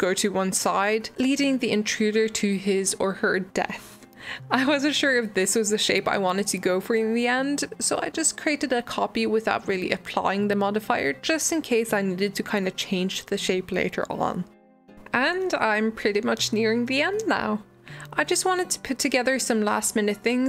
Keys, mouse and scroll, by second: 0.0 click, 0.4-1.1 middle drag, 1.5 click, 1.8 shift+middle drag, 2.0 g, 5.5 click, 5.6-6.6 middle drag, 6.6 shift+click, 7.3 alt+d, 8.2 shift+middle click, 8.5 click, 9.0 click, 10.0 click, 10.3 click, 10.8 click, 11.2 middle click, 11.3 scroll up 2, 11.5 click, 12.2 h, 12.3 click, 12.4 middle click, 12.5 Tab, 12.7 middle click, 13.6 click, 13.9 ctrl+z, 14.2 click, 14.5 click, 15.5-16.0 middle drag, 16.0 scroll down 1, 16.1-16.5 shift+middle drag, 16.5 alt+d, 17.2 g, 18.3 Delete, 19.0 click, 19.3 Tab, 19.9 shift+d.